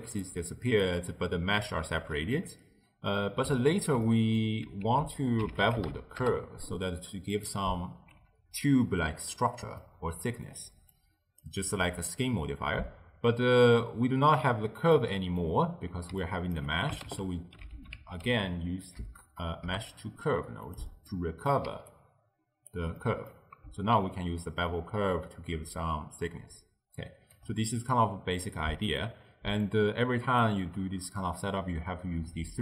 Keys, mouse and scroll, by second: 0.9 d, 2.4-4.9 middle drag, 4.9 ctrl+a, 9.8-11.0 middle drag, 11.0 click, 15.0-16.2 middle drag, 16.2 d, 16.3 click, 16.7 d, 17.1 ctrl+a, 21.1 middle click, 21.7 d, 22.0 right click, 22.8 d, 22.8 d, 22.9 d, 23.0-24.0 middle drag, 24.0-27.1 shift+drag, 27.8-29.7 middle drag, 29.7 click.